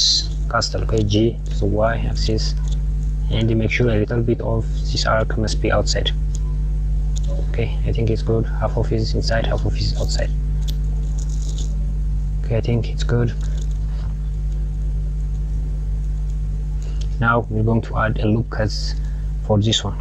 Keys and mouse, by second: 1.0 g, 8.5 click, 9.2 click, 10.7 click, 17.1 click, 19.5 click.